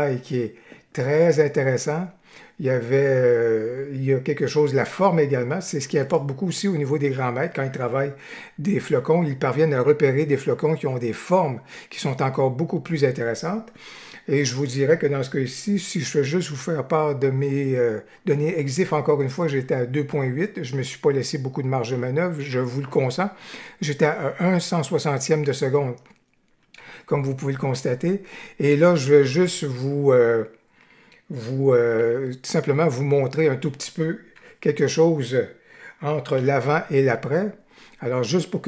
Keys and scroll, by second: 16.1 F8, 26.7 F8, 31.9 d, 34.3 F8, 36.4 y.